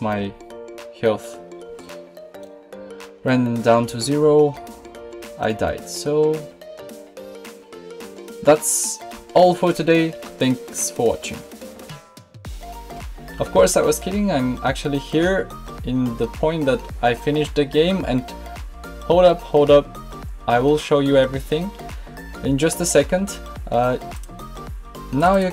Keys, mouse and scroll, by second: 2.5-5.1 middle drag.